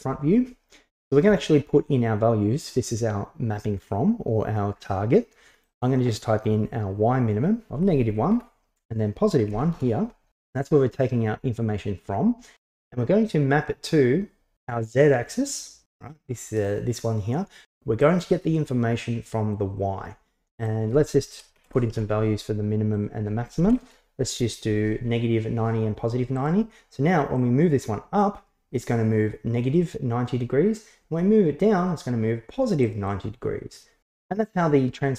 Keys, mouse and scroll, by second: 5.8-10.4 drag, 18.0-19.6 drag, 20.6-22.6 drag, 23.1-24.9 drag, 26.4 click, 27.4-33.1 drag.